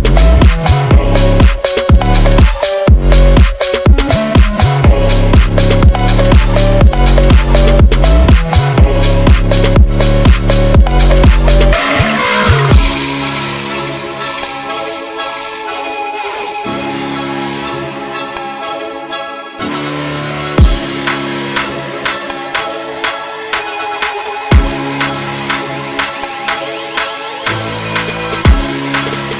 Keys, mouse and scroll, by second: 0.3 click, 0.8 right click, 1.1 click, 1.8 right click, 3.8 click, 3.9 click, 4.6 ctrl+z, 4.8 click, 5.1 e, 6.6 m, 6.8 click, 7.3 2, 8.3 alt+shift+click, 8.9 g, 9.5 click, 10.4-10.8 ctrl+z, 11.1 click, 11.4 ctrl+z, 11.6 ctrl+z, 11.7 click, 12.1 g, 12.7 s, 13.1 click, 13.3 s, 14.1 right click, 14.5 click, 15.1 right drag, 15.2 scroll down 1, 15.5 click, 15.9 e, 16.6 click, 16.9 s, 17.4 m, 17.7 click, 17.9 1, 18.1 click, 18.3 g, 19.4 click, 19.5 click, 20.0 Tab, 20.4 click, 20.6 Tab, 20.9 ctrl+r, 21.3 2, 21.6 alt+click, 22.1 alt+shift+click, 23.4 shift+click, 24.1 s, 24.5 ctrl+z, 24.7 e, 25.4 ctrl+z, 26.0 alt+e, 27.2 click, 27.6 click, 27.9 g, 28.3 click, 28.5 g, 28.7-29.0 scroll down 1, 29.0 m, 29.2 drag.